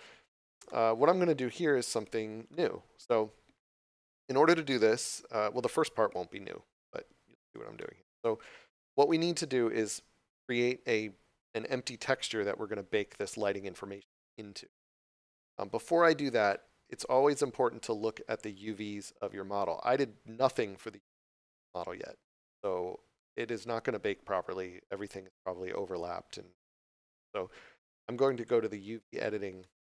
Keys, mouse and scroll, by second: 0.0 scroll down 1, 0.7 middle click, 28.3 click, 29.6 middle click.